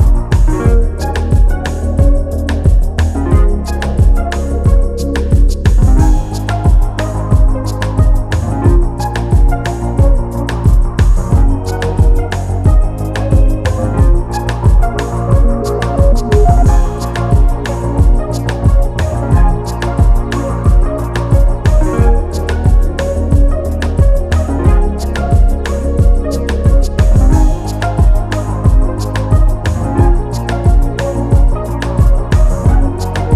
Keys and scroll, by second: 32.3 ctrl+s.